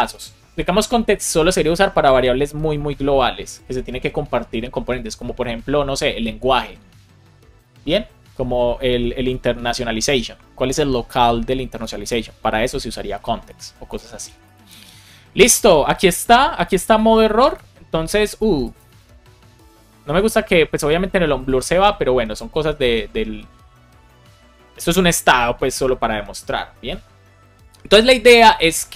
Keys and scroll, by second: 22.7 super+r.